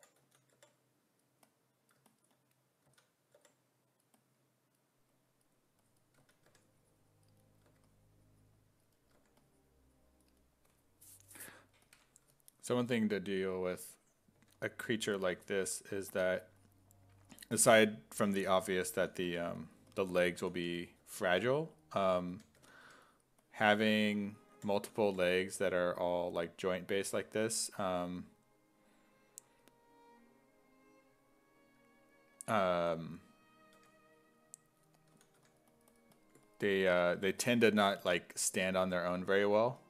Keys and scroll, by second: 0.2 s, 0.6 5, 2.9 s, 3.4 5, 6.2 s, 6.5 1, 7.7 1, 9.2 1, 14.4 1, 15.3 1, 16.4 1, 17.6 1, 19.0-25.9 typing, 33.8 1, 34.9-35.9 typing, 37.7 1, 39.0 1.